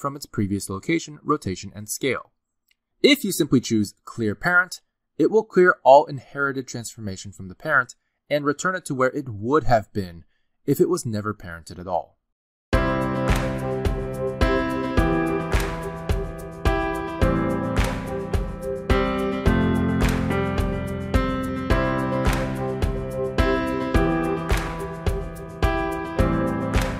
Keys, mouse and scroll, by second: 0.3 click, 0.5 g, 1.0 r, 1.9 g, 4.6 ctrl+z, 5.1 ctrl+z, 5.6 right click.